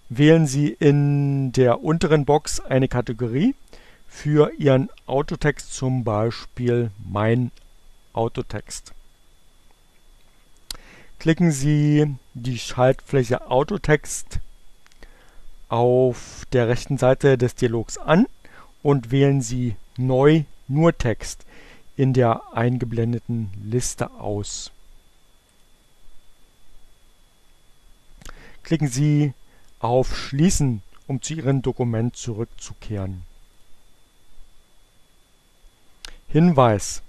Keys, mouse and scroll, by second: 14.9 click, 25.1 click, 32.9 click.